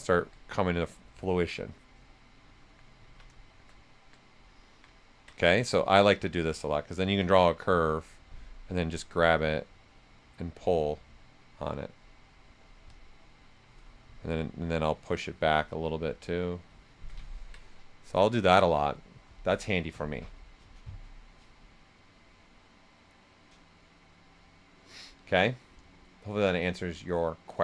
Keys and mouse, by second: 4.2 right click, 6.0-8.6 ctrl+drag, 8.6-11.5 ctrl+drag, 11.5 ctrl+right click, 12.8 ctrl+click, 14.1-17.3 shift+drag, 17.3 ctrl+right click.